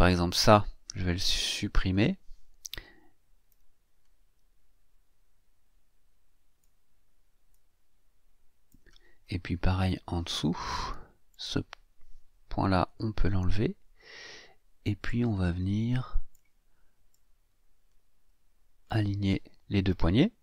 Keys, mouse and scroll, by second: 1.9 Delete, 3.5-6.8 drag, 7.5-8.9 drag, 9.3-10.7 scroll down 3, 11.3 click, 12.9 Delete, 15.0-16.5 drag, 17.1-19.0 drag.